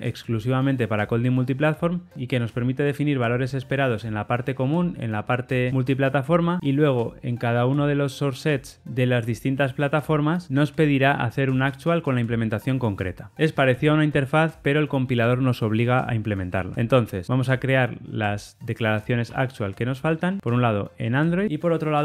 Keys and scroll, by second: 16.7 alt+Return.